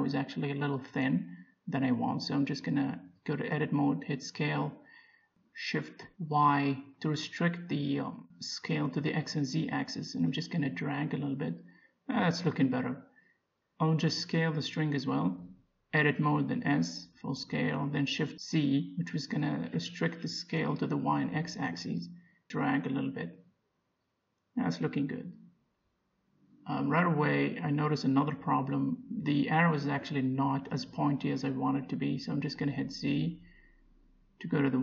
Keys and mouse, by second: 1.0-2.5 middle drag, 2.5 Tab, 4.4 s, 11.7 Tab, 13.6 click, 14.4 Tab, 16.1 a, 17.1 s, 25.2 Tab, 25.6-27.4 middle drag, 28.7-30.3 drag, 29.3-30.3 right drag, 30.5 middle click, 30.7 Tab, 34.2 z, 34.7 a.